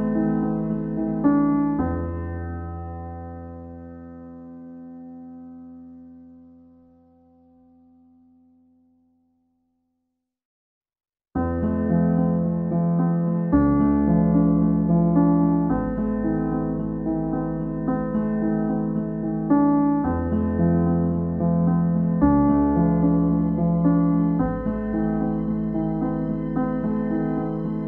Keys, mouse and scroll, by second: 0.1-0.8 scroll up 4, 0.8-6.0 drag, 6.0 ctrl+a, 6.9 click, 7.7-8.0 scroll down 2, 8.4-9.0 scroll up 2, 9.0 click, 12.9-14.2 drag, 16.4 click, 17.0 ctrl+a, 17.8 shift+click, 19.2 ctrl+l, 19.9 click, 20.4 shift+middle click, 20.7-21.2 scroll up 1, 21.2 click, 21.7-23.5 right drag, 23.5 ctrl+z, 23.9 click, 24.7 click, 25.1 shift+middle click, 25.3-25.7 scroll up 2, 25.7 click.